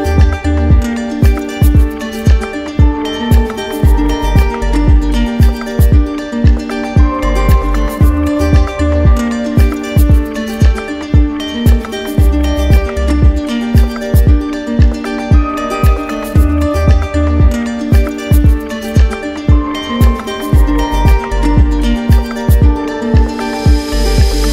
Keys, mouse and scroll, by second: 3.0 click, 4.5 alt+click, 8.9 click, 9.1 ctrl+z, 13.7 click, 15.0 click, 16.1 alt+click, 18.5 alt+click, 20.4 alt+click, 22.6 click.